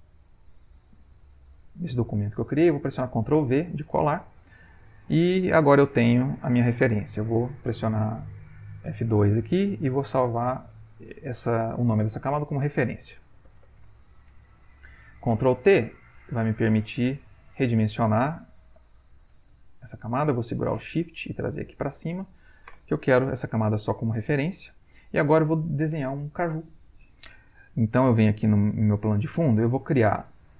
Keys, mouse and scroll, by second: 1.9-3.5 middle drag, 3.5 ctrl+v, 6.7 click, 9.6 F2, 10.7 shift+r, 12.4-14.2 typing, 15.5 ctrl+t, 16.9 click, 18.0-20.6 drag, 20.9-22.4 shift+drag, 22.7 Return, 27.7 click.